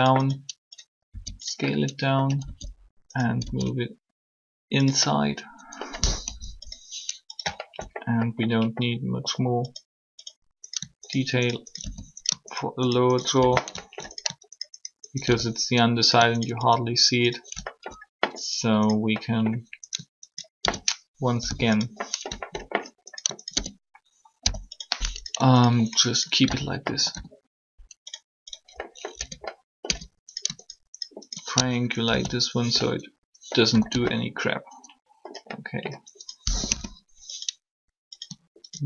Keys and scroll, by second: 6.2 3, 21.2 shift+0, 24.4 shift+0, 26.9 typing, 29.2 Tab, 29.8 Tab, 33.7 typing, 36.6 3.